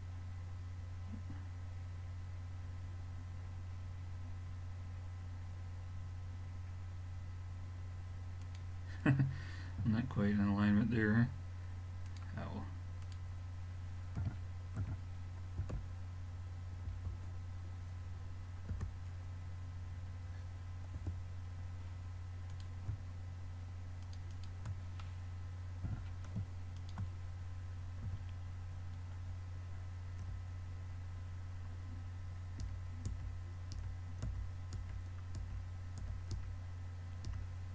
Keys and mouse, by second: 4.5 middle click, 5.0 middle click, 9.8 a, 12.1-14.7 drag, 14.2 r, 22.5-26.1 drag, 25.9 g, 28.1 a, 28.3-28.9 middle drag, 30.3 l, 32.6-37.3 typing.